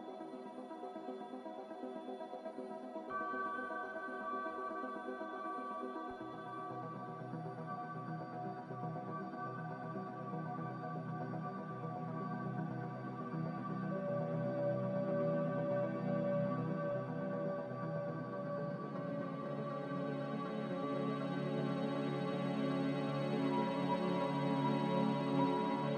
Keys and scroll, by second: 0.6 x, 1.9-2.9 typing, 3.1 Return, 7.5 z, 9.3-10.2 typing, 10.2 Escape, 11.3 Delete, 11.9 x, 13.0-16.1 typing, 18.3 z, 19.6-20.5 typing, 23.0-24.9 typing.